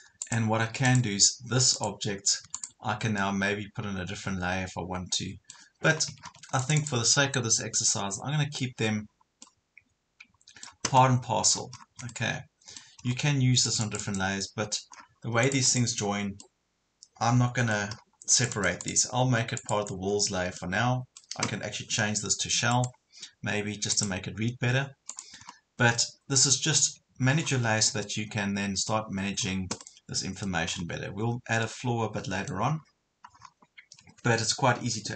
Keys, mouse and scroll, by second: 3.0 ctrl+click, 3.2 middle click, 4.4 scroll up 1, 5.9 Escape, 6.2 scroll down 1, 6.6 click, 7.2 scroll up 1, 7.8 middle click, 8.2 scroll up 1, 9.4-11.0 middle drag, 11.2 scroll up 1, 11.6 scroll down 1, 12.1 middle click, 13.0 scroll up 1, 13.7 click, 15.0 scroll down 1, 15.4 click, 16.4 middle click, 17.9 scroll up 1, 18.4 click, 20.1 scroll down 1, 20.6-22.1 middle drag, 22.7 right click, 25.1 click, 25.4 scroll up 1, 26.0-27.1 middle drag, 27.4 scroll down 1, 28.0-29.1 middle drag, 29.4 scroll down 1, 29.8 middle click, 30.7 scroll up 1, 31.6 middle click, 32.8 scroll down 1, 33.4 scroll up 1.